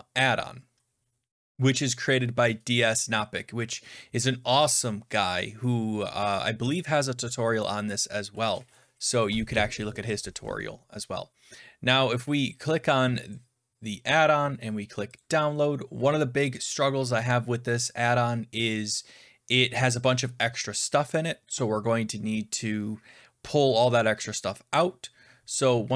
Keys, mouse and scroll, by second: 8.7 F11, 9.1 F11, 9.1 F10, 13.3 click, 15.1 click.